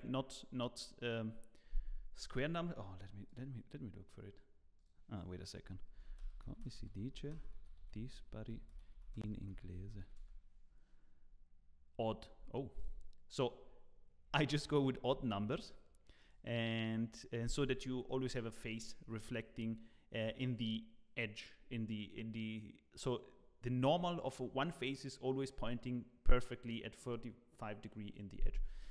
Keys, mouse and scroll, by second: 16.2 click, 16.8 click, 28.6-28.9 scroll down 5.